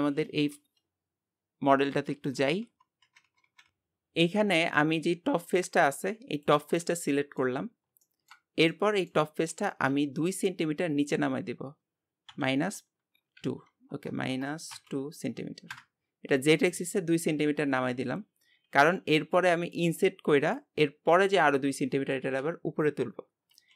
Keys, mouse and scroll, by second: 5.8-6.9 drag, 6.9 shift+middle click, 7.7-8.1 scroll up 1, 8.1-9.5 shift+middle drag, 9.5 g, 17.9-21.5 scroll up 1.